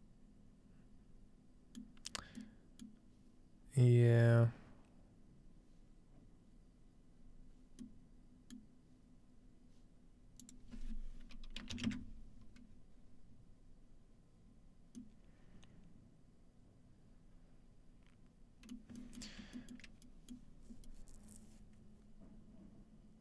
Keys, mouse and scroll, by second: 2.7-4.6 scroll down 1, 8.6-10.6 middle drag, 8.6-9.2 scroll down 1, 9.2-10.6 scroll down 1, 10.6-12.6 drag, 15.0-17.4 middle drag, 20.6-22.6 shift+middle drag, 20.6-22.6 scroll up 1.